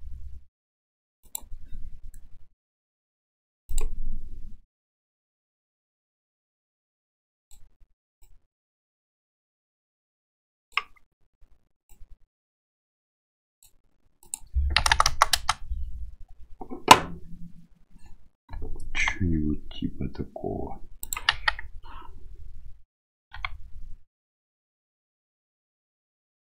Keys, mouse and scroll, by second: 3.8 click, 6.3-7.6 drag, 8.3-10.8 drag, 11.9-13.7 drag, 14.3-16.1 drag, 15.1 KP_0, 19.0 g, 21.4 KP_1, 23.4 g.